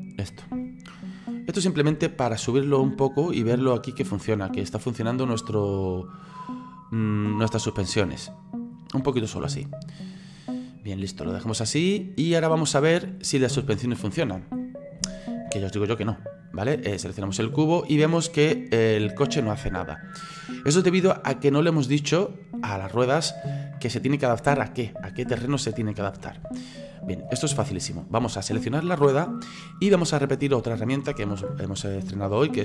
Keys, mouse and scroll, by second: 0.3 shift+right click, 0.9-3.1 middle drag, 3.1 click, 6.3-10.7 middle drag, 10.7-12.0 drag, 12.0-13.3 middle drag, 13.3 scroll up 2, 13.6-14.4 shift+middle drag, 14.4 scroll up 1, 14.6 middle click, 15.5 shift+scroll up 1, 15.6 middle click, 16.2 scroll down 1, 17.1 right click, 17.7-26.6 drag, 26.6-29.0 shift+middle drag, 29.0 right click.